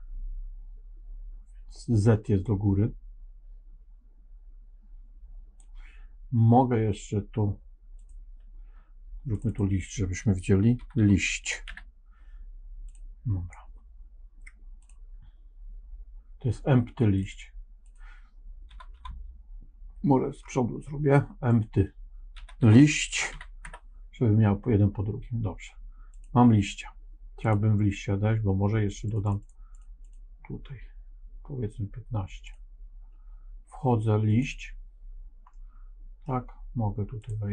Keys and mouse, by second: 2.4-5.5 drag, 9.4-12.8 drag, 14.7 click, 17.0 click, 20.3-24.4 drag, 20.3 BackSpace, 27.4 click, 29.0 click, 29.1 click, 29.3 click, 29.7 click, 29.9 click, 32.4 click, 34.2 click, 35.4 middle click, 37.1 click.